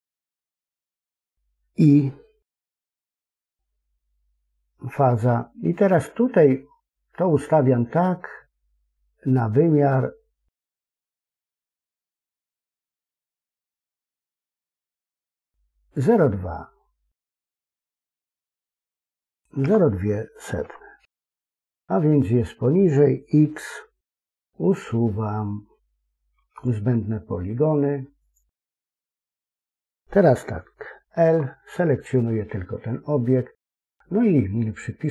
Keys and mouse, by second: 2.4 i, 5.2-14.3 drag, 17.4-21.7 drag, 18.9 BackSpace, 23.9 x, 26.3 x, 28.9 middle click, 31.0 l.